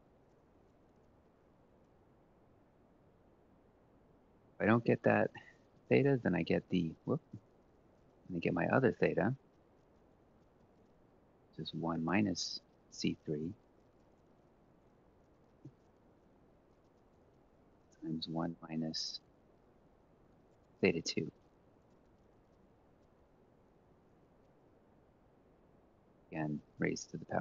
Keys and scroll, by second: 6.6-7.9 typing, 10.8-17.8 typing, 24.5 F4, 25.6-26.3 typing.